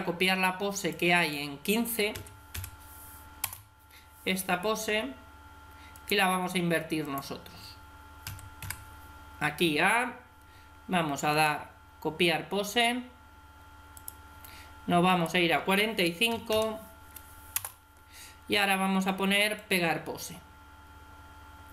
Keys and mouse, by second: 0.6-2.8 drag, 5.8-6.9 right drag, 6.9-8.4 drag, 8.1 a, 8.5 a, 14.9-16.6 drag, 19.4-21.1 drag.